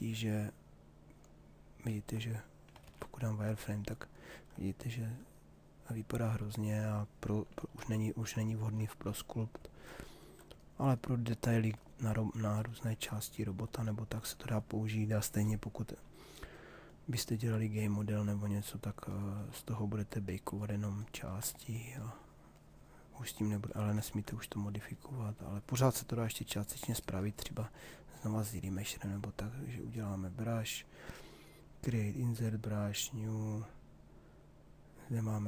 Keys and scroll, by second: 2.3 shift+f, 7.3 shift+f.